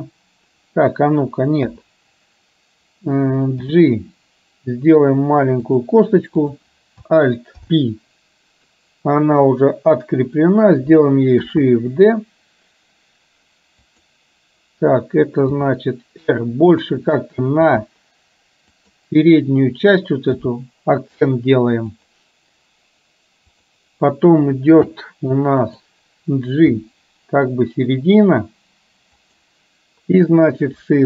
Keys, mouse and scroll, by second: 1.8 KP_7, 3.7 g, 6.6 click, 7.6 alt+p, 11.6 shift+d, 15.6 r, 17.7 g, 20.4 g, 22.1 click, 23.6 click, 25.7 click, 26.8 g.